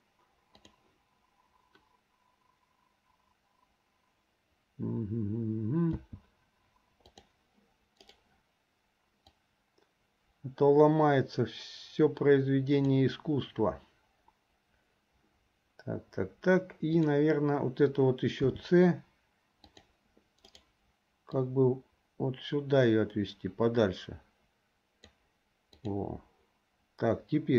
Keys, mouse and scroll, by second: 0.9 click, 5.9 c, 9.5-13.0 drag, 17.1 click, 19.0 c, 21.4-25.2 drag, 25.8 click.